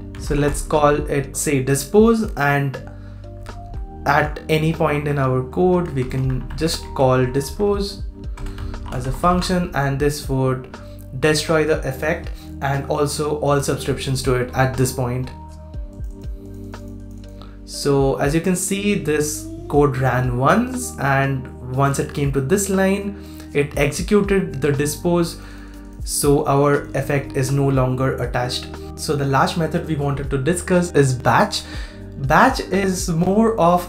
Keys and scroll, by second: 3.4 super+Page_Down, 3.6 super+Page_Down, 9.3 super+s, 28.8 super+x.